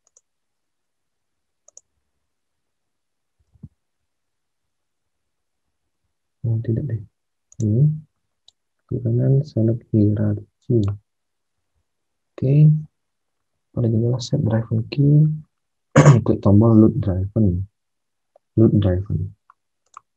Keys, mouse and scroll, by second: 3.4 alt+Tab, 5.9 alt+Tab, 11.6 alt+Tab, 16.8 alt+Tab.